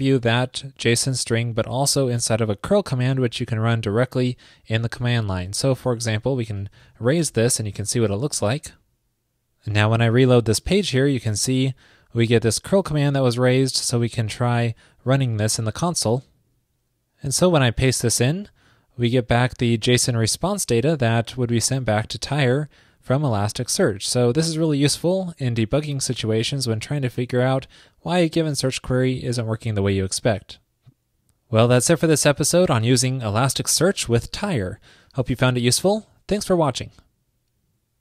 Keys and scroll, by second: 5.2 alt+Left, 7.6 super+s, 10.6 super+r, 15.6 super+c, 18.3 super+v.